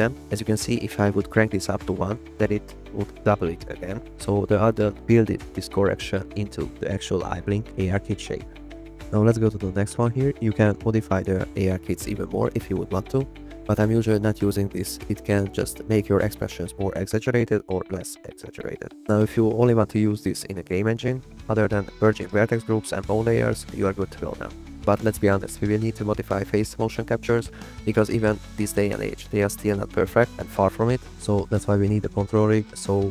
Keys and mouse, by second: 2.4 click, 4.5 click, 5.8 click, 6.4 click, 7.4 click, 10.6 click, 14.0 click, 17.2 click.